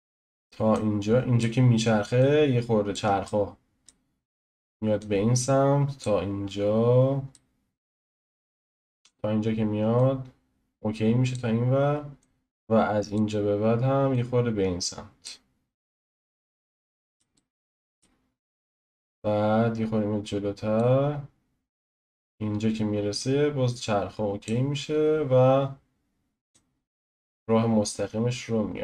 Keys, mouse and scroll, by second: 0.7-2.2 drag, 3.2-5.0 shift+middle drag, 5.0-6.4 drag, 6.4 middle click, 6.4 scroll down 1, 7.0 scroll down 1, 7.3-8.6 shift+middle drag, 8.6-10.0 drag, 12.2-14.1 drag, 16.1-16.5 scroll down 1, 16.5-18.8 middle drag, 18.8-23.2 drag, 25.1-26.5 scroll down 1, 26.5-28.8 drag.